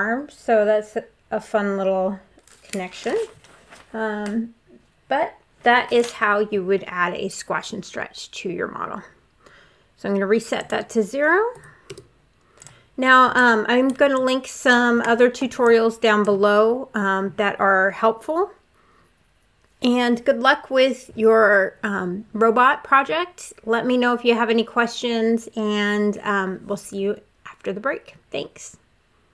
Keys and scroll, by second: 11.3 0, 11.7 Return.